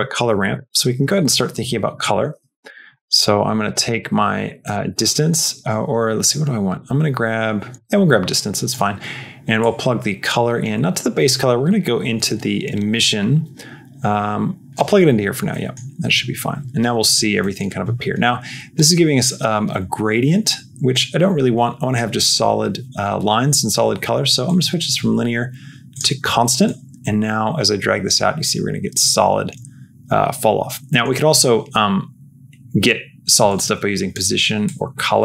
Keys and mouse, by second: 2.8 click, 3.6 click, 4.6 click, 7.6 click, 9.5-14.6 drag, 15.4 middle click, 17.4 middle click, 18.6-20.8 drag, 24.5-25.9 drag, 26.5-28.9 drag, 30.8 middle click, 33.5 click, 34.5 click.